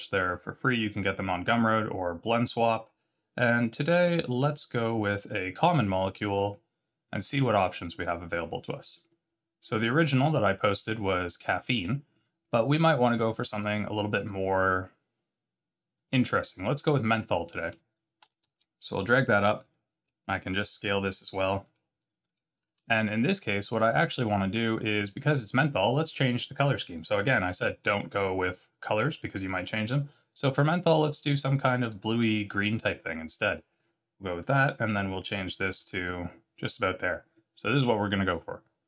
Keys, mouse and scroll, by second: 18.3 g, 20.6 s, 22.2 click, 22.6 scroll up 3, 23.8 middle click, 24.5 scroll down 2, 25.1 click, 29.6 click, 33.5 click, 34.3 click, 37.0 click, 38.2 click.